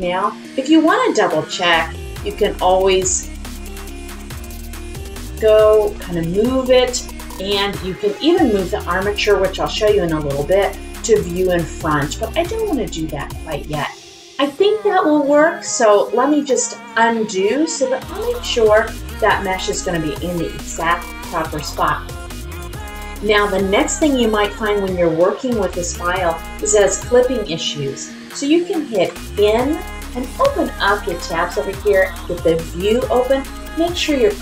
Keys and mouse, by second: 1.7-2.2 drag, 2.8-3.3 drag, 3.7 middle click, 5.0 click, 5.9-15.2 middle drag, 16.2 click, 26.5 middle click.